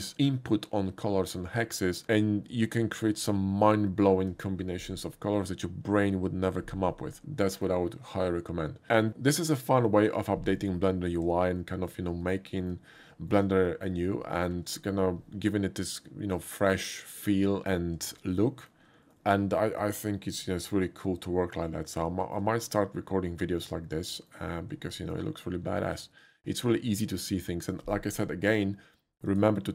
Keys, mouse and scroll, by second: 7.5 shift+middle click, 11.7 shift+middle click, 12.3 shift+middle click, 13.0 shift+middle click, 13.7 shift+middle click, 14.3 shift+middle click, 18.5 shift+middle click, 19.2 shift+middle click, 20.4-21.1 shift+middle drag, 22.1 shift+middle click, 22.7-24.3 shift+middle drag, 25.0 shift+middle click, 29.3 click.